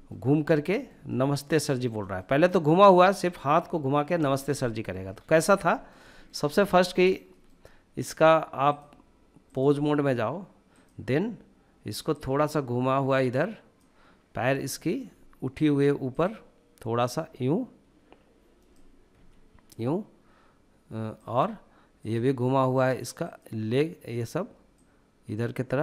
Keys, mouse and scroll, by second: 1.7-3.5 shift+middle drag, 4.5 middle click, 4.9 scroll up 1, 5.1 shift+middle click, 5.4 middle click, 5.8-6.3 shift+middle drag, 6.5 scroll up 1, 6.7 shift+middle click, 7.1-8.2 shift+middle drag, 8.4-9.6 drag, 10.5 click, 13.5 click, 14.4 shift+middle click, 15.9 click, 16.7 click, 18.9 g, 21.0 click, 21.7-25.8 drag.